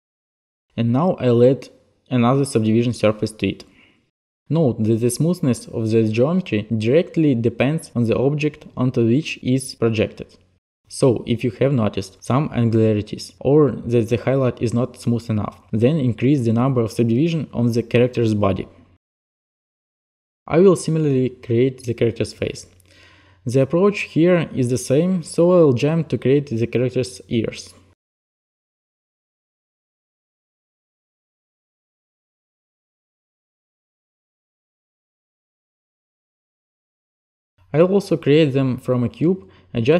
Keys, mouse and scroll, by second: 3.0 alt+click, 4.5 alt+click, 9.8 alt+click, 10.6 alt+click, 11.4 alt+click, 12.9 click, 14.6 click, 16.6 click, 19.0 alt+click, 20.2 n, 21.0 a, 22.7 n, 23.2 click, 23.6 click, 23.8 click, 24.3 click, 24.4 click, 24.6 shift+click, 25.1 click, 25.4 click, 25.7 click, 25.8 t, 26.1 click, 26.2 e, 26.6 click, 27.0 click, 27.3 click, 27.4-28.8 typing, 28.1 click, 28.8 shift+click, 29.2 drag, 30.0 click, 30.1 e, 30.8 click, 30.9 click, 31.1 click, 31.2 shift+click, 31.7 click, 31.8 click, 32.0 click, 32.5 click, 32.7 click, 32.8 shift+click, 33.0 t, 33.3 right click, 33.9 t, 34.3 right click, 34.4 e.